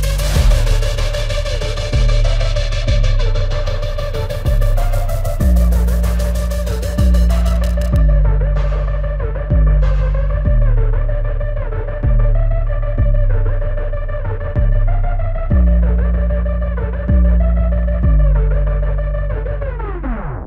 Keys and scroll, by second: 8.9 ctrl+alt+z, 9.9 ctrl+alt+z.